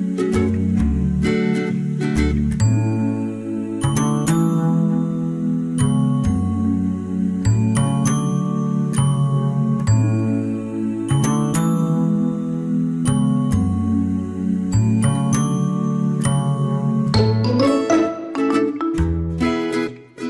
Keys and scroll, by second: 0.6 ctrl+z, 1.4 ctrl+z.